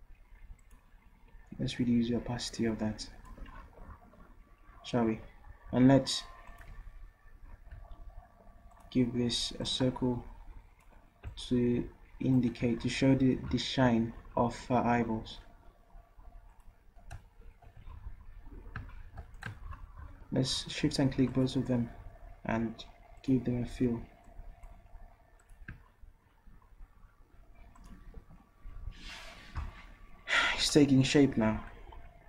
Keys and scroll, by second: 4.7 v.